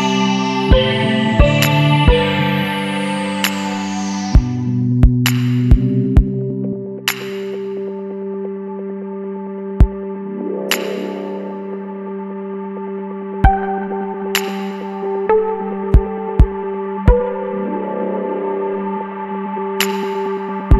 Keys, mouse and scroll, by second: 0.0 click, 2.3 click, 3.5-4.2 drag, 4.7 click, 7.6 click, 8.8 KP_2, 9.1 KP_5, 10.6 click, 11.6 KP_2, 11.8 KP_1, 12.1 KP_5, 14.1 click, 15.0 KP_0, 16.7 click, 17.6 click, 18.0 scroll down 1, 18.9 scroll up 1.